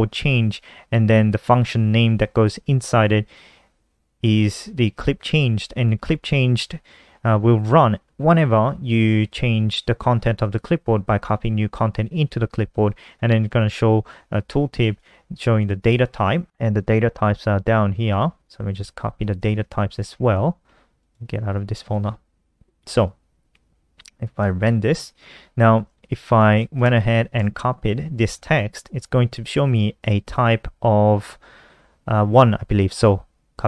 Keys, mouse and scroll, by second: 0.4 click, 4.9 click, 5.1 click, 13.2 click, 14.6 click, 15.9 click, 16.1-17.2 scroll down 1, 17.2 click, 18.5 ctrl+c, 18.8 click, 19.5 ctrl+End, 19.8 Return, 19.9 Return, 20.1 ctrl+v, 20.4 ctrl+s, 21.4 click, 21.6 ctrl+w, 22.2 click, 24.6 click, 24.8 ctrl+s, 25.0 F5, 25.6 click, 26.8 shift+Home, 27.0 shift+Right, 27.1 shift+Right, 27.4 shift+Right, 27.5 shift+Right, 33.3 ctrl+c.